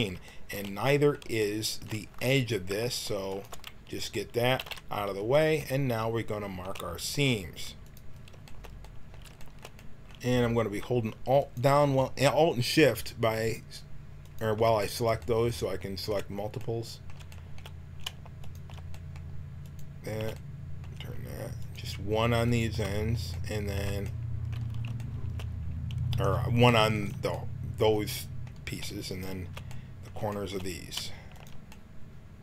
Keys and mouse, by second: 3.2-5.5 drag, 4.5 x, 7.8-9.7 drag, 8.8-20.4 middle drag, 11.3-16.5 drag, 18.9-22.4 drag, 23.4 click, 26.9-32.4 drag.